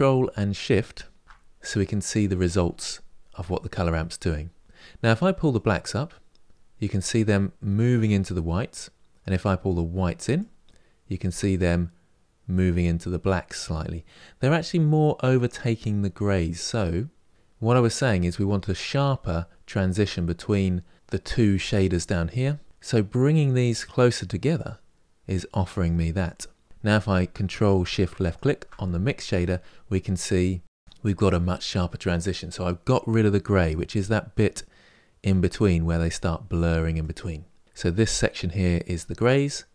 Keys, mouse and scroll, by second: 1.2 ctrl+shift+click, 5.4-8.2 drag, 10.1-13.1 drag, 23.3-28.0 drag, 29.6-33.4 middle drag, 33.4-36.7 drag, 37.6-39.7 drag.